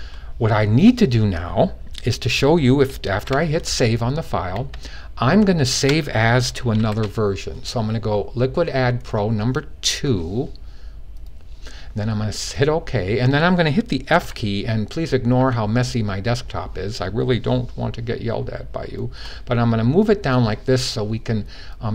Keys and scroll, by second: 2.9 super+s, 9.8 2, 14.0 f, 15.2 f.